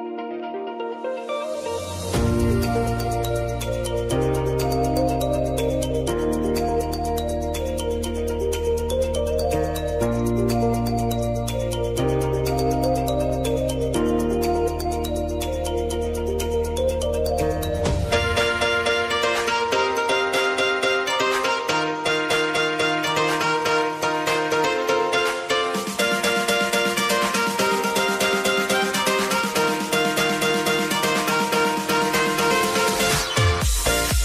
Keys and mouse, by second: 1.3 F9, 2.7-6.4 drag, 6.6 space, 8.3 click, 9.6 space, 11.1 click, 12.0 r, 12.9 ctrl+d, 14.3 click, 15.5 Return, 16.7 click, 19.9 click, 20.9 Return, 22.1 click, 22.4 ctrl+d, 22.8 r, 23.8 click, 24.6 Return, 25.0 click, 25.5 ctrl+d, 25.8 r, 26.6 click, 27.6 Return, 28.6 click, 29.0 ctrl+d, 29.2 r, 29.9 click, 31.2 Return, 33.2 click, 34.0 ctrl+d.